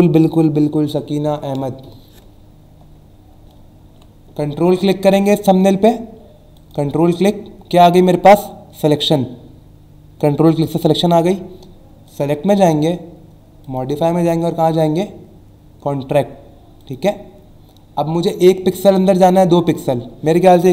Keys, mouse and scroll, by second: 3.5 alt+Num_Lock, 3.5 alt+scroll down 1, 6.6 ctrl+click, 12.1 click, 13.6 click, 16.8 click.